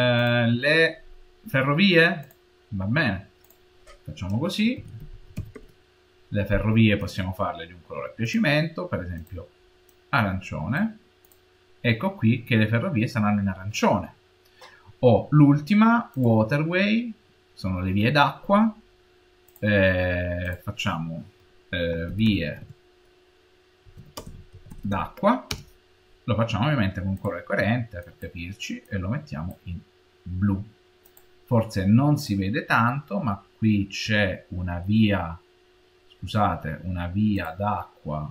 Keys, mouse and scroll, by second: 0.0 click, 5.0 shift+r, 8.1 click, 11.1 click, 16.0 click, 19.3 click, 20.3 click, 27.0 click, 30.9 click, 32.0 click, 32.5-34.0 middle drag, 32.5-34.0 scroll down 4, 34.1 middle click, 34.3 middle click, 34.5 middle click, 35.7-37.1 middle drag, 37.2-38.3 drag.